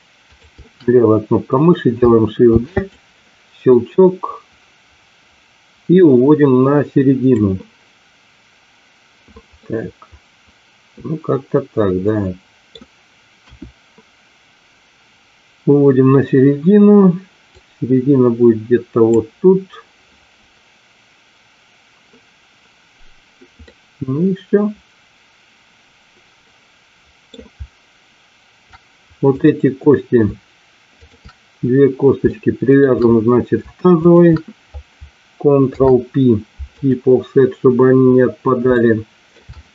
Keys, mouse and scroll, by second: 2.5 shift+d, 3.7-7.2 drag, 9.6-12.6 middle drag, 13.5 KP_1, 17.5-19.2 drag, 23.5-27.3 middle drag, 29.4 click, 31.0 shift+click, 32.2 shift+middle click, 34.0 shift+click, 35.8 ctrl+p, 38.9 shift+middle click.